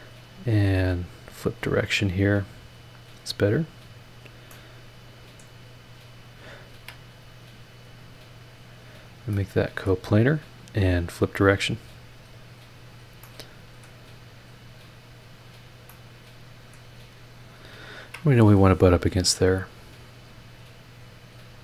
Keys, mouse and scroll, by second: 1.2 click, 4.0 click, 4.5-5.6 middle drag, 5.6 scroll up 2, 6.2 click, 6.7 ctrl+click, 8.2 click, 9.3 click, 11.0 click, 12.8 click, 13.2 middle click, 13.3 click, 14.8 click, 15.4 click, 15.9-16.9 middle drag, 16.0 click, 16.9 scroll down 1, 17.3-17.7 scroll up 1, 17.9 ctrl+click, 20.5 click.